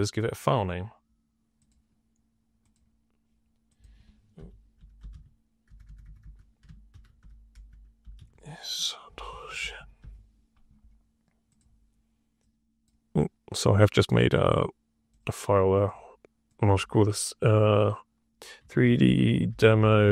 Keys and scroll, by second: 4.0-10.4 typing, 18.3-20.1 typing.